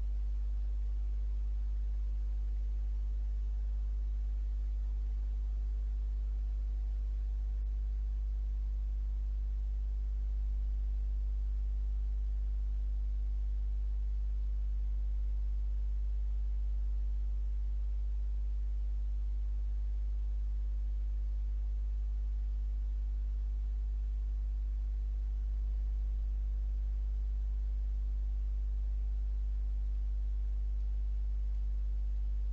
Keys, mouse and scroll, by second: 0.4-1.9 shift+drag, 2.5-3.9 shift+drag, 4.5-5.8 shift+drag, 6.4-7.8 shift+drag, 13.1-14.9 shift+drag, 16.5 ctrl+z, 18.8-20.5 shift+drag, 21.0-22.5 shift+drag, 23.0-24.5 shift+drag, 28.7 shift+click, 30.0 shift+click, 30.9 shift+click, 31.6 shift+click, 32.2 shift+click.